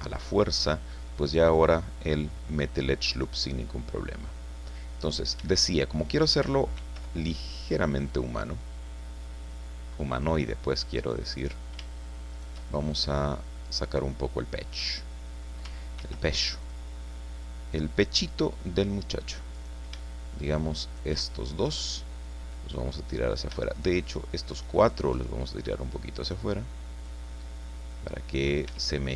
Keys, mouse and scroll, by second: 1.2-2.9 drag, 5.0 right click, 6.7 ctrl+r, 8.1 click, 10.1 click, 11.4 right click, 12.3 shift+right click, 12.7 shift+middle click, 14.8 middle click, 16.0 ctrl+r, 16.6 ctrl+click, 18.2 click, 19.5 right click, 20.8 shift+right click, 21.2 shift+middle click, 23.7 shift+right click, 24.8 shift+right click, 25.7-27.2 drag, 27.3-28.6 middle drag, 28.7 Tab, 29.0-29.1 drag.